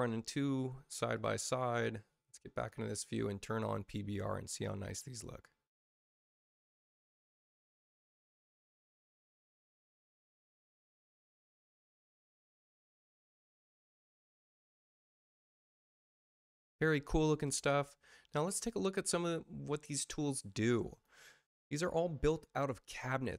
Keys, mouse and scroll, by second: 1.1 click, 2.5 click, 4.4 click, 13.2 click, 18.3 space, 20.3 space, 20.8 click.